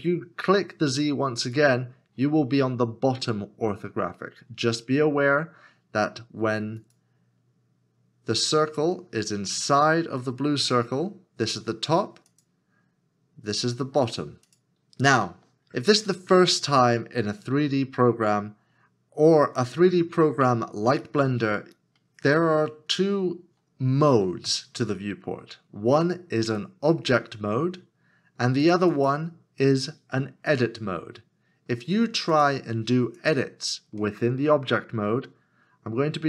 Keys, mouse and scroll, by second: 16.1 middle click, 34.0 middle click.